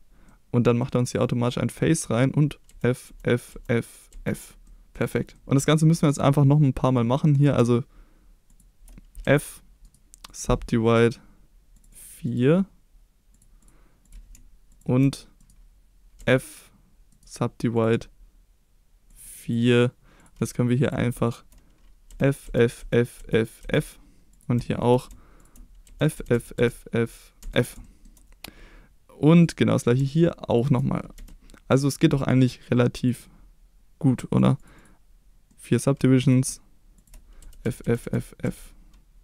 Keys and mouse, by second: 0.3 middle click, 1.5 middle click, 2.7 f, 3.1 f, 3.5 f, 4.1 f, 4.7 middle click, 5.4 middle click, 5.7 shift+middle drag, 7.3 click, 9.2 f, 10.0 right click, 11.8 click, 12.1 click, 13.4 click, 15.6 right click, 16.2 f, 17.3 right click, 19.1 click, 19.3 click, 19.4 click, 22.1-23.6 typing, 24.3 click, 24.7 middle click, 25.4 shift+click, 25.9-27.4 typing, 27.8 shift+middle click, 29.7 middle click, 31.2 f, 31.7-32.3 middle drag, 32.3 right click, 34.4 click, 34.7 click, 35.5 middle click, 37.4-38.5 typing.